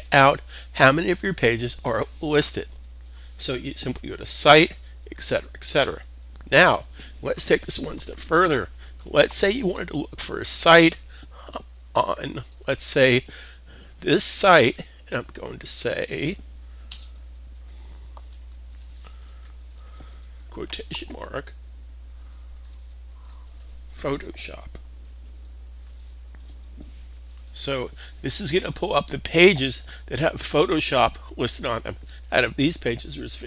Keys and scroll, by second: 16.7 space, 18.1-19.9 typing, 22.1-25.4 typing, 28.3-29.0 typing.